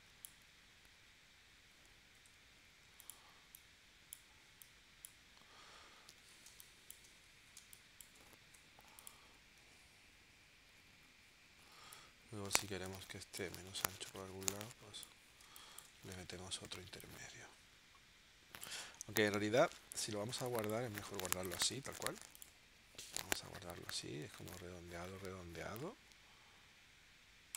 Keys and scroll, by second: 2.2 a, 6.5 space, 7.5 space, 8.5 v, 9.6 shift+w, 15.4 space, 18.9 super+z, 20.3 space, 21.3 v.